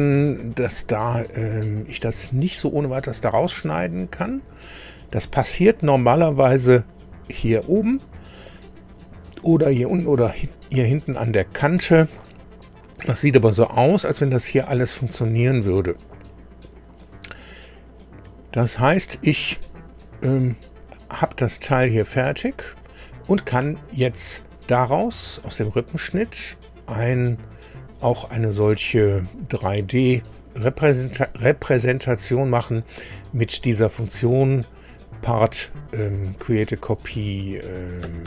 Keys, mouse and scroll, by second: 1.4 scroll down 1, 2.2 shift+middle click, 3.4-3.8 shift+scroll up 1, 9.8-10.1 scroll down 1, 10.4 shift+middle click, 11.8 scroll up 2, 20.0 scroll down 2, 25.4 click.